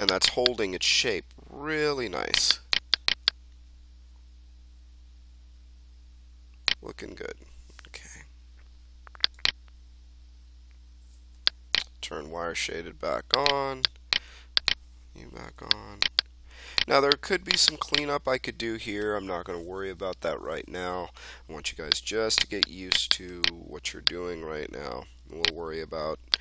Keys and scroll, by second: 9.9 1, 15.0 1.